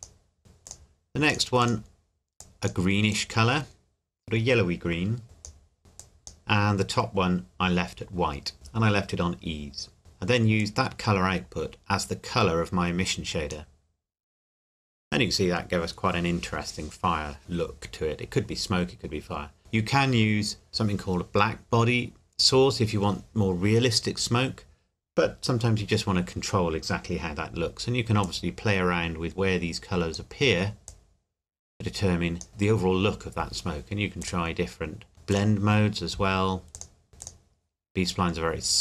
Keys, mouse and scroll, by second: 10.6 click, 28.2 click, 34.2 click.